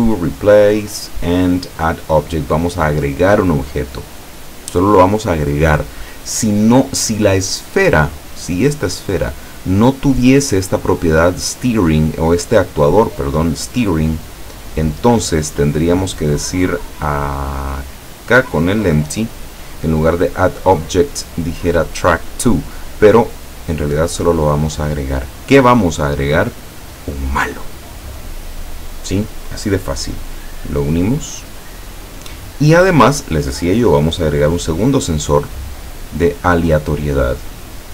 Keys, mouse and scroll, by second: 6.1 click, 8.4 click, 9.0 right click, 14.9 click, 16.0 click, 18.1 right click, 18.5 right click, 19.9 click, 24.8 click, 27.1 click, 30.4-31.9 drag, 32.7-33.5 middle drag, 35.3 click, 37.5 click.